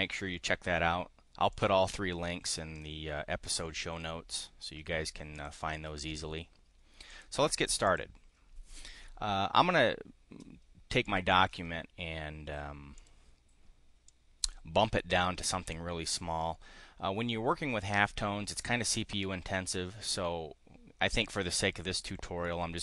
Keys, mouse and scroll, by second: 1.5-2.9 drag, 5.3 click, 7.0 click, 7.6 click, 11.0 click, 12.9 click, 14.0 click.